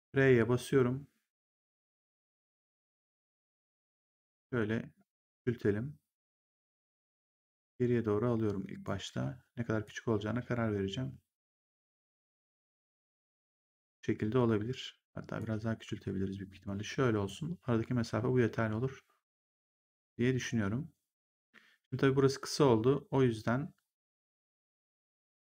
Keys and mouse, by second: 4.0 click, 6.9 w, 7.5 click, 9.0 r, 9.8 click, 15.3 click.